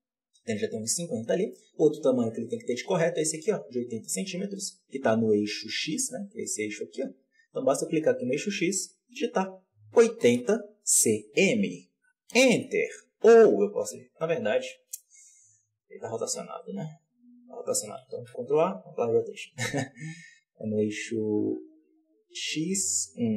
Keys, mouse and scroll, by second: 0.4-1.4 scroll up 1, 1.4-2.4 scroll up 1, 2.4 scroll up 1, 6.4-15.3 drag, 15.3-18.0 scroll down 1, 18.0 ctrl+a, 21.1-23.3 drag.